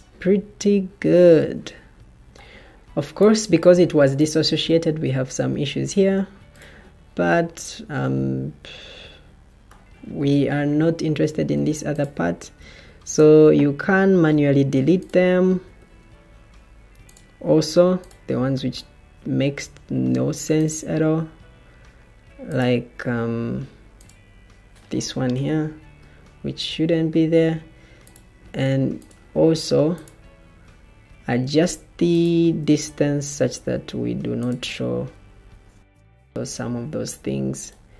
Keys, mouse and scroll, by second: 11.2 Escape, 12.5 Escape, 15.7 Escape, 25.2 Delete, 30.6 Escape, 30.6 ctrl+z, 35.4 Escape.